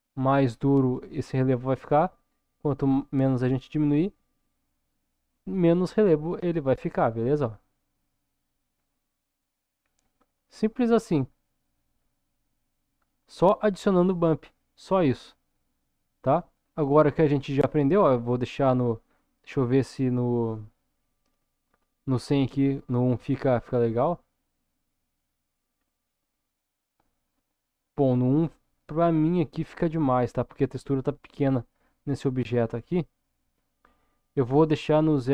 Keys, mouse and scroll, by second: 10.6-11.1 scroll down 2, 11.1 middle click, 12.3 scroll up 1, 12.9-13.8 scroll up 1, 15.5-17.3 middle drag, 18.7-24.5 drag, 21.4 BackSpace, 25.7-26.3 scroll down 1, 26.3-28.8 scroll up 1, 33.8-35.3 drag.